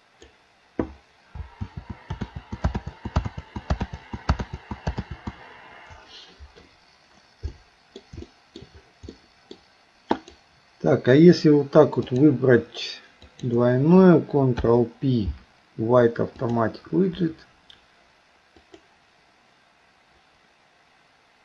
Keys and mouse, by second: 1.7 ctrl+z, 2.3 ctrl+z, 3.5 ctrl+z, 5.1 ctrl+z, 7.5 middle click, 8.3 shift+middle click, 9.1 middle click, 10.1 click, 12.1 shift+click, 13.3 shift+click, 14.6 ctrl+p, 18.7 click.